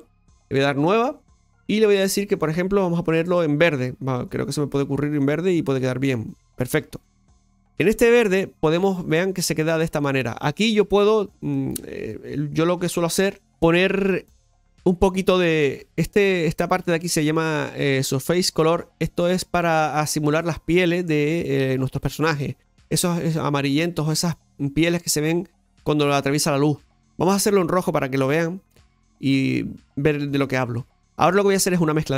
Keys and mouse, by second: 0.9 click, 4.4-7.2 drag, 7.2-11.5 middle drag, 11.5 click, 13.0 click, 13.5 middle click, 16.4 middle click, 26.6 click.